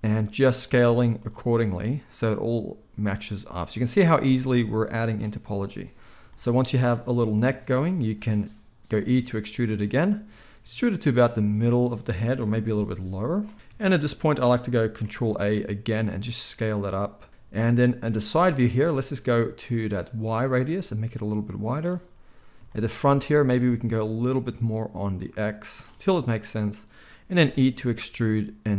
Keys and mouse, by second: 0.8-5.0 middle drag, 0.8 z, 5.0 click, 5.1-20.0 middle drag, 8.9 e, 12.6 g, 15.4 ctrl+a, 20.0-28.7 drag, 27.3 e.